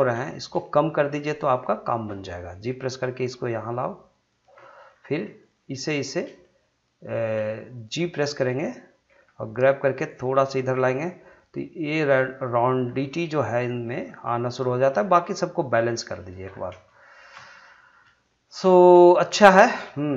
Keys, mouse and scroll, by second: 0.2 shift+middle click, 0.6 middle click, 1.5 shift+click, 2.7 g, 4.2 click, 4.6 middle click, 5.4 click, 6.0 shift+click, 6.4-7.8 middle drag, 7.8 shift+click, 8.3 middle click, 9.1 g, 10.7 click, 11.9 g, 12.5 click, 12.8 scroll down 1, 13.1 middle click, 13.7 click, 13.9 g, 14.4 click, 14.9 middle click, 15.6 click, 15.7 g, 16.2 click, 16.5-16.9 scroll down 1, 17.0 shift+middle click, 17.3 middle click, 18.7 scroll up 1, 19.0 shift+middle click, 19.9 shift+middle click.